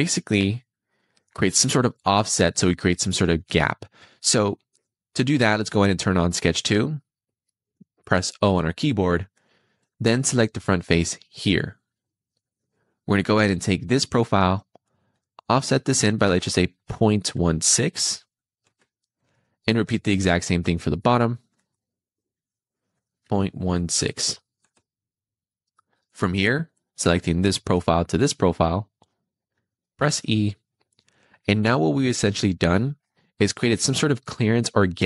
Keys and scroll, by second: 8.5 o, 16.9 ., 18.5 Return, 21.5 o, 23.2 ., 24.7 Return, 29.9 e.